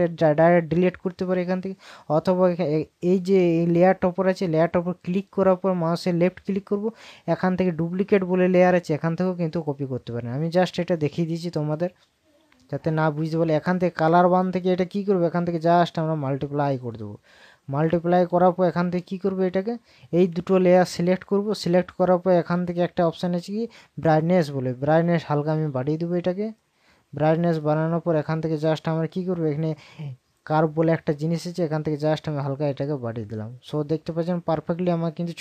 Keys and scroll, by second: 19.5 ctrl+KP_Subtract.